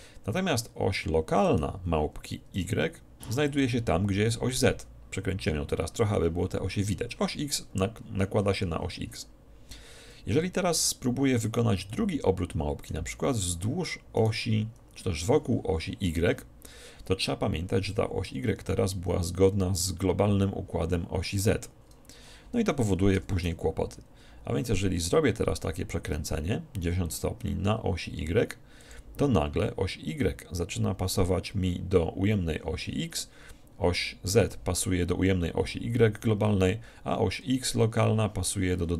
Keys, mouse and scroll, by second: 1.5-3.3 right drag, 2.7 r, 3.7-5.4 drag, 10.8 ctrl+z, 12.0 middle click, 14.3-16.2 right drag, 23.3 r, 28.9-30.9 drag.